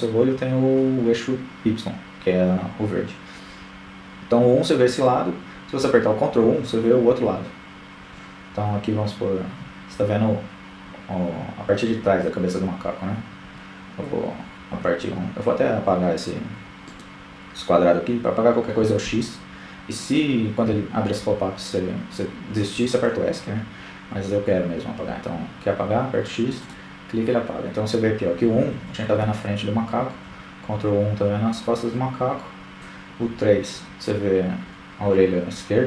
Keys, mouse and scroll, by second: 1.2 KP_1, 3.7 ctrl+KP_1, 10.3 ctrl+KP_1, 11.4 KP_1, 13.5-15.1 right drag, 15.7 x, 21.7 x, 25.1-25.5 KP_1, 25.7 KP_1, 26.0 KP_1, 27.6 ctrl+KP_1, 30.1 KP_3, 33.7 ctrl+KP_3.